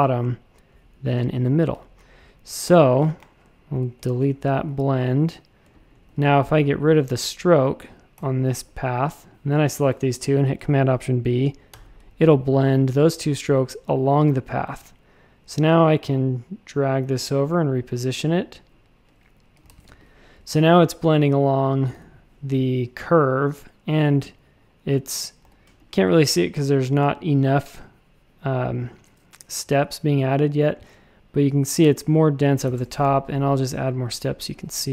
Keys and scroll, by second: 3.8 alt+shift+super+b, 4.5 a, 5.6 space, 6.0 a, 8.1 /, 11.7 alt+super+b, 14.7 a, 19.7 shift+super+a, 20.0 space, 21.9 v, 25.4 v, 32.6 w, 32.7 Return.